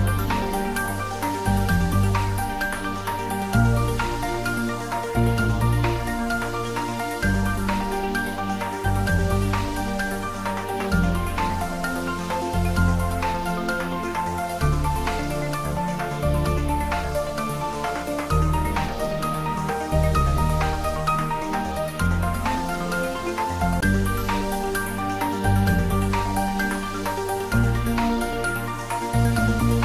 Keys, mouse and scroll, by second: 2.1-2.6 scroll up 1, 2.6-6.0 middle drag, 6.2 click, 9.3 scroll down 1, 9.8-13.7 middle drag, 13.7 z, 14.8 click, 18.3 click, 21.0 click, 23.6 scroll up 1, 24.5-26.2 shift+drag, 26.2 shift+z, 26.6-28.3 drag, 28.3 shift+d.